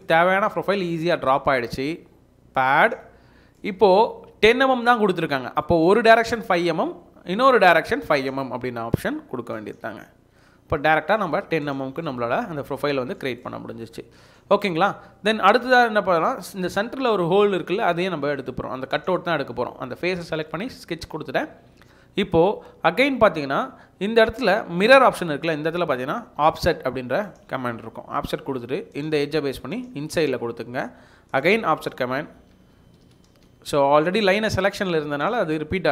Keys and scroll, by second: 7.1 5, 10.2 5, 32.5 Escape, 33.0 Escape, 33.8 Escape.